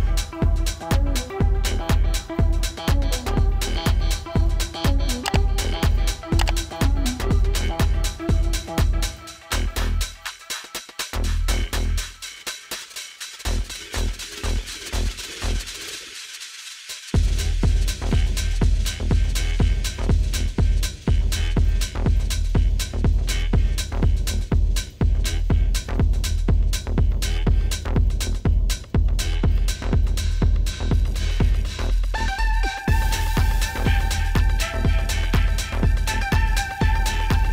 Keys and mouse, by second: 1.6-3.4 typing, 1.9 click, 2.4 click, 3.0 click, 3.4 click, 5.7-9.3 typing, 5.7 click, 6.6 click, 7.6 click, 9.4 click, 11.5-14.2 typing, 11.6 click, 12.1 click, 14.1 click, 16.3 -, 16.4 space, 16.4 click, 16.5 space, 20.4 click, 24.9 right click, 25.9 click, 26.3 Return, 30.3 click, 34.0-34.6 typing, 35.7 click.